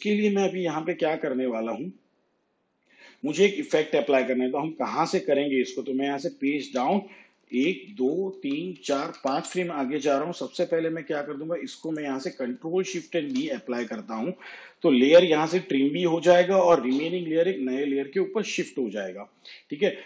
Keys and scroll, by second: 6.3 shift+Page_Down, 7.5 ctrl+Right, 13.2 ctrl+shift+d.